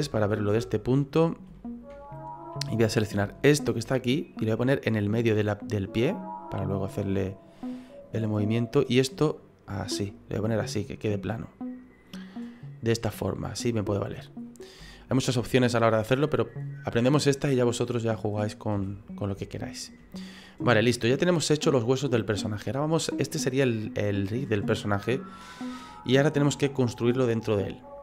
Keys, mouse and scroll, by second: 0.3 scroll up 4, 0.6 shift+middle click, 1.2 scroll up 3, 1.5 shift+middle click, 2.8 right click, 3.5 shift+right click, 4.5 click, 6.6 click, 8.4 right click, 9.2 click, 11.3 middle click, 13.0 middle click, 13.3-13.9 scroll down 5, 13.7 middle click, 14.0 scroll up 1, 14.2 scroll down 2, 14.8 scroll down 6, 14.8 shift+middle click, 15.2 middle click, 15.7 middle click, 16.1 shift+middle click, 16.3 scroll up 2, 18.0-18.7 scroll up 2, 19.3 shift+KP_1, 19.6 shift+middle click, 21.8 click, 22.7 middle click, 24.8 middle click.